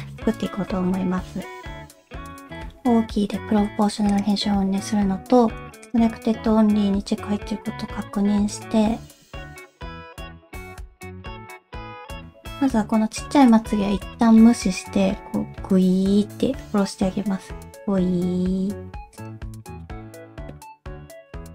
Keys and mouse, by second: 0.0-2.0 ctrl+drag, 2.2 o, 2.5 o, 4.1-5.5 drag, 5.9-7.3 drag, 9.1 alt+z, 9.6 shift+click, 9.9 shift+click, 10.2 shift+click, 10.5 middle click, 10.7 ctrl+z, 11.1 shift+click, 11.4 shift+click, 11.7 alt+z, 11.8 middle click, 13.9 g, 19.8 shift+middle click, 20.0 KP_1, 21.3 alt+z.